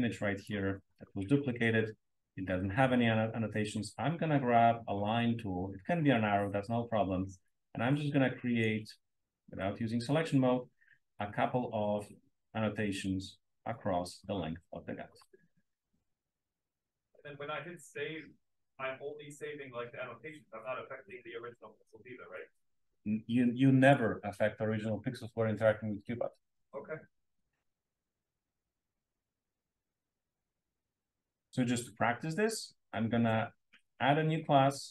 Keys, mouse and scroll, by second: 0.3-0.9 drag, 1.4-3.6 scroll down 2, 2.0 click, 3.6 scroll down 1, 3.8-5.0 scroll up 2, 5.0 click, 5.0-5.9 scroll up 1, 5.9 scroll up 1, 7.4-8.5 drag, 9.3 click, 11.1 click, 12.2-14.0 drag, 15.9 click, 17.6 click, 18.6-19.6 drag, 22.3-24.1 drag, 30.1-31.2 drag, 32.6-34.0 scroll up 1, 34.0-34.9 scroll up 1.